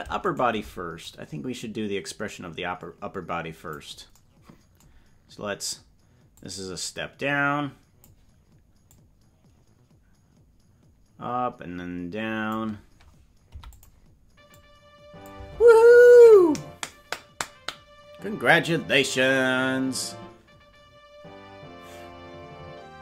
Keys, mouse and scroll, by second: 0.3 shift+right click, 1.1-3.8 drag, 6.3-8.1 drag, 8.9-12.6 drag, 13.4 i, 14.6 click.